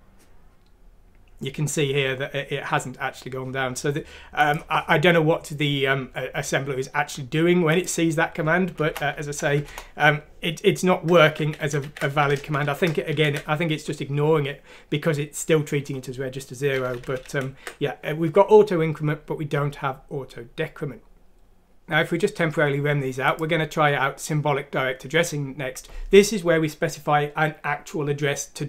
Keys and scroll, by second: 8.8 typing, 9.5 F6, 9.6 Return, 10.2 typing, 11.3 ctrl+z, 11.6 ctrl+z, 11.8 ctrl+z, 12.3 ctrl+z, 12.6 ctrl+z, 13.1 ctrl+z, 17.0 ctrl+z, 17.2 typing.